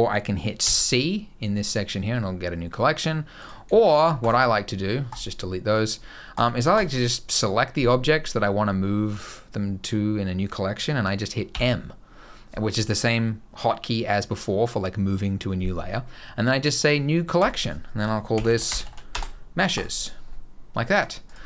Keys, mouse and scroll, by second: 0.3 c, 3.1 click, 3.6 shift+click, 3.9 right click, 6.0 click, 6.5 shift+click, 9.6 middle click, 11.2 m, 20.7 click, 21.0 click.